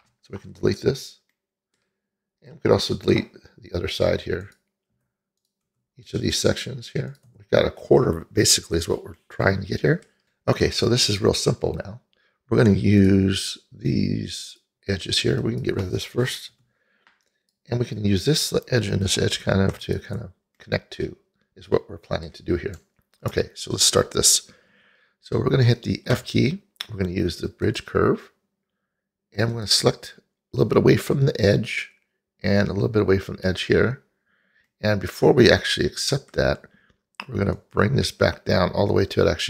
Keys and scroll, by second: 1.0 Delete, 5.0 Delete, 5.7 Delete, 7.3 Delete, 16.6 Delete, 26.2 f.